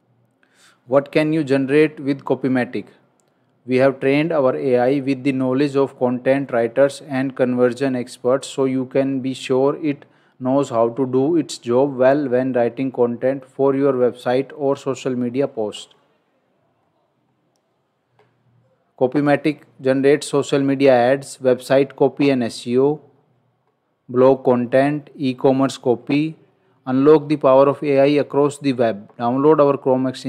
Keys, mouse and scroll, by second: 16.7-17.3 scroll up 1, 17.3 scroll down 1, 22.6 scroll down 1, 25.9 scroll down 1.